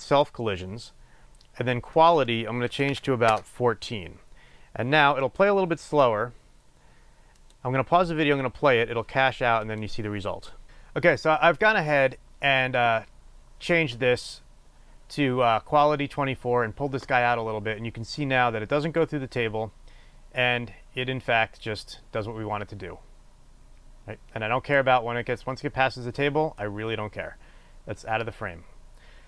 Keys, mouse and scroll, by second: 0.0 click, 2.1-8.6 drag, 9.9 click, 11.9 click, 16.2-17.4 scroll down 1, 18.3-29.2 drag.